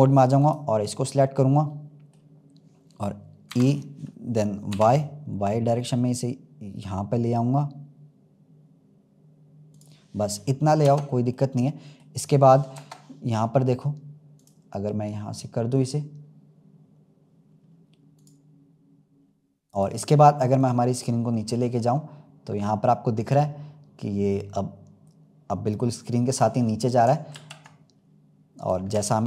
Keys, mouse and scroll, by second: 0.3 click, 0.8-3.4 middle drag, 3.4 e, 10.8 Tab, 11.3-12.6 middle drag, 12.6 KP_0, 14.6 click, 17.4-17.9 scroll down 2, 18.1-19.1 drag, 19.1-19.7 scroll up 1, 19.7-20.6 drag, 26.6-27.3 scroll down 3, 27.3 ctrl+z, 27.9-28.5 scroll down 2, 28.5 click.